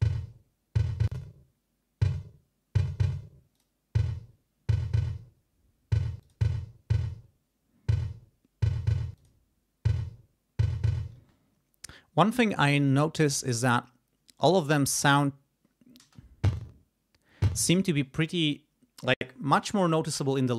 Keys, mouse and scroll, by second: 1.1 click, 3.6 click, 6.2 click, 9.2 click, 11.2 space, 15.0 click, 16.0 space, 17.5 space.